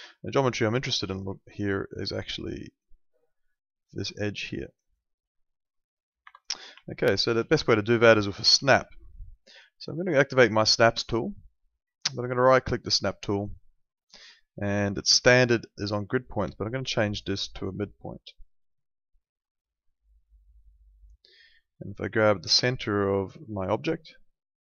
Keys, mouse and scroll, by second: 2.3 ctrl+2, 6.2 Escape, 6.8 alt+middle click, 8.4 w, 10.8 click, 12.9 right click, 16.2 click, 24.0 click.